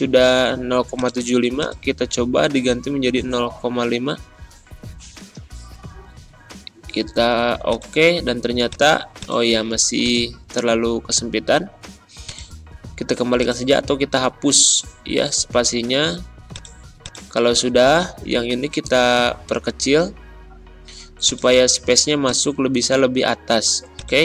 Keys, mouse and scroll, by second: 3.7 BackSpace, 4.9 typing, 7.3 typing, 7.6 click, 11.1 ctrl+z, 12.2 click, 14.2 BackSpace, 16.4-18.7 drag, 18.7 ctrl+[, 21.2-23.8 drag.